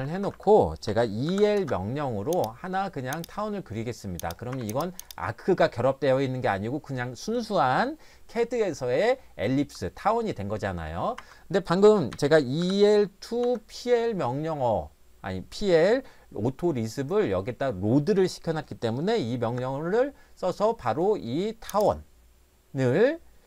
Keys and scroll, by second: 0.0 Escape, 0.2 Escape, 0.3 Escape, 0.9 e, 1.3 l, 1.6 Return, 4.5 Escape, 11.2 Escape, 12.1-13.4 typing, 19.4 Return.